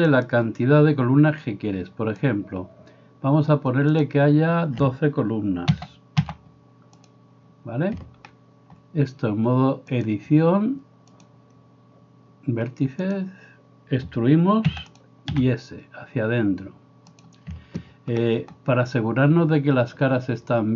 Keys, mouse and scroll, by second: 10.1-15.1 drag, 11.3 middle click, 14.7-20.7 middle drag, 14.7 e, 15.4 s.